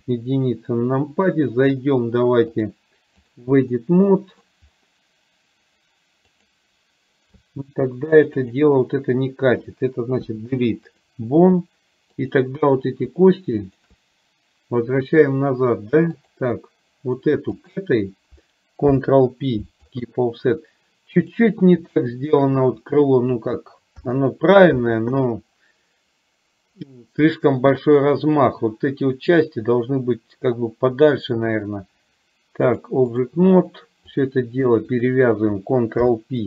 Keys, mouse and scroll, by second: 2.7-3.4 drag, 3.8 middle click, 8.4 shift+click, 10.2 Delete, 12.2 click, 13.7 shift+click, 16.4 click, 17.8 shift+click, 18.9 ctrl+p, 21.3 click, 22.4 shift+click, 24.1 ctrl+p, 32.9 click, 34.2 click, 36.1 ctrl+p.